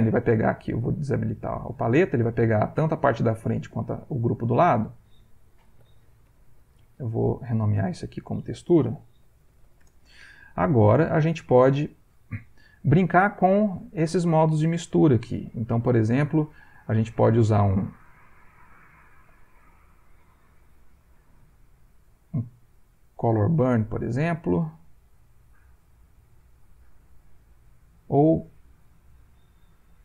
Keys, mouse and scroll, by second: 1.3 click, 4.6 click, 5.5-6.8 typing, 7.7 click, 9.0 shift+t, 9.5 shift+u, 9.8 Return, 10.8-11.9 middle drag, 10.8 scroll, 11.4 ctrl+scroll, 14.7-17.3 drag, 18.5 click, 20.2 click, 21.5 click, 23.2 click, 24.3-25.7 drag, 26.0 click, 28.3-30.0 drag.